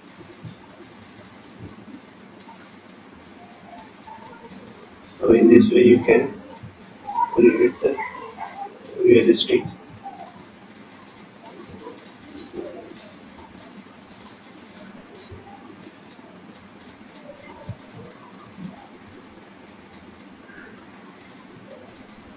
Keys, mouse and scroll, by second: 3.6 click, 10.9-11.4 scroll down 8, 11.7-12.6 scroll up 8, 12.6 scroll up 1, 12.7 shift+middle click, 13.9 click, 15.6 click, 15.6-16.0 scroll down 4, 16.1-17.0 scroll up 3, 17.0 scroll up 1, 17.8 shift+click, 21.9-22.3 scroll down 6.